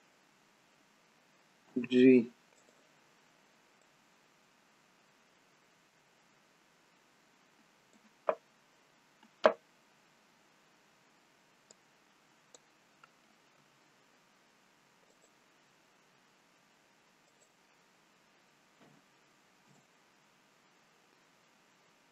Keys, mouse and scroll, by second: 0.2-1.5 scroll down 2, 1.8 g, 3.9 click, 9.6-11.3 scroll down 6, 11.7 click, 11.7-12.6 scroll down 1, 13.6 s, 17.3 click, 21.1-22.1 scroll up 8.